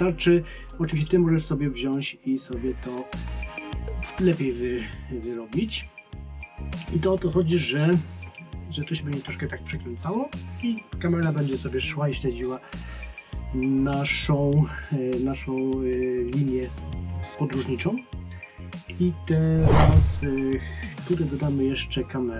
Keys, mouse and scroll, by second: 6.4 click, 22.0 click.